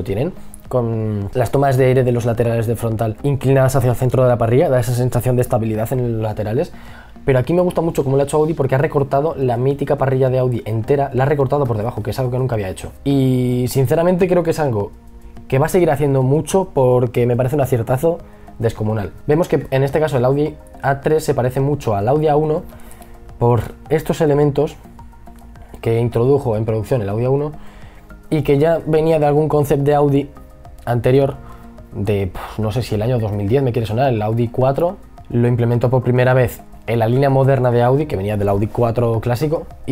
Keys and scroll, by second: 11.0 e, 12.9 b.